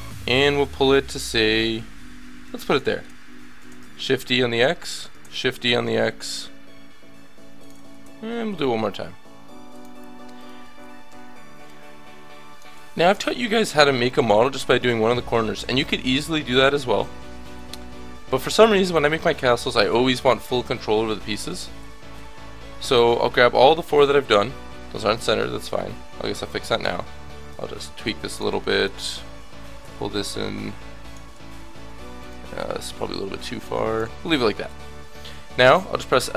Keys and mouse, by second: 0.2 g, 3.6 shift+d, 5.1 shift+d, 7.9 shift+d, 11.1 l, 12.0 click, 12.7 a, 13.0 middle click, 18.3 middle click, 20.2 KP_7, 22.2 l, 23.5 l, 24.5 l, 25.2 l, 26.4-27.5 drag, 26.9 l, 28.2 click, 28.5 a, 29.4-32.2 drag, 29.5 l, 31.3 a, 33.0 l, 34.7 l, 35.1 l, 35.7 l.